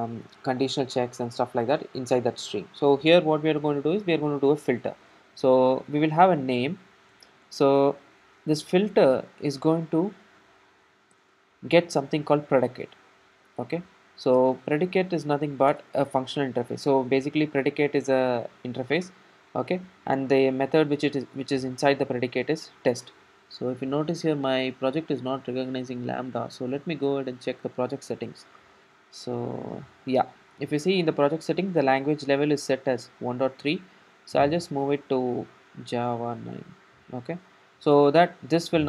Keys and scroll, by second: 11.2 super+p, 16.0 Return, 37.7 ctrl+alt+super+;, 37.8 ctrl+alt+super+;.